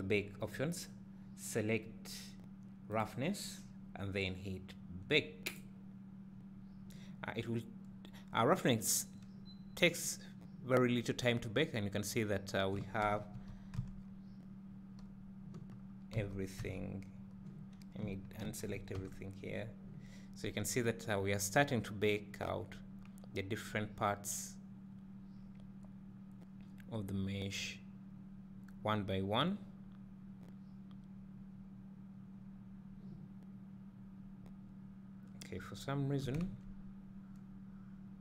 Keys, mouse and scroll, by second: 3.0 click, 6.3-16.0 drag, 11.6 scroll up 1, 13.4 a, 13.8 h, 16.2 a, 19.4 Tab, 36.9 Tab.